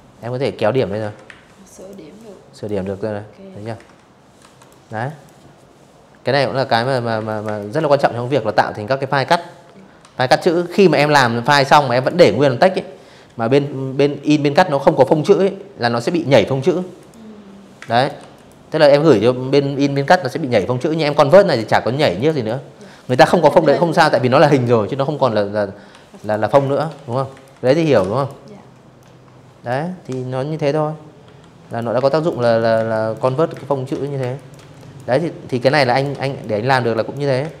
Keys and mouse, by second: 1.4 ctrl+z, 2.1 v, 2.3 click, 2.7 click, 4.5 click, 4.9 z, 4.9 click, 5.1 space, 5.3 click, 5.5 v, 5.6 click, 7.7 v, 7.9 click, 8.5 click, 9.7 click, 14.3 v, 14.6 click, 15.4 space, 15.5 click, 15.9 v, 16.0 click, 17.6 click, 18.8 click, 19.8 click, 20.1 click, 21.6 click, 21.8 click, 23.6-25.7 typing, 23.9 click, 24.3 click, 25.1 click, 25.5 click, 25.8 click, 26.6 click, 28.9 Delete, 29.3 click, 29.6-32.2 typing, 29.7 click, 30.2 click, 30.6 click, 31.0 click, 31.3 click, 31.7 click, 32.0 click, 32.5 click, 33.1 click, 33.3 space, 33.5 click, 33.8 z, 33.9 click, 34.6 click, 35.1-37.6 typing, 35.1 click, 35.5 click, 35.8 click, 36.2 click, 36.5 click, 36.8 click, 37.3 click.